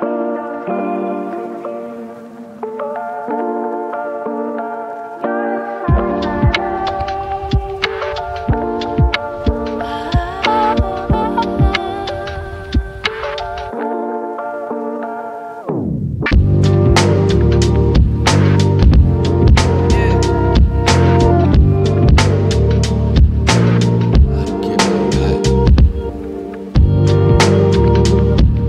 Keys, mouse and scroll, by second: 16.3 ctrl+Num_Lock, 16.8 ctrl+m, 20.8 shift+click, 25.4 typing, 27.9 right click.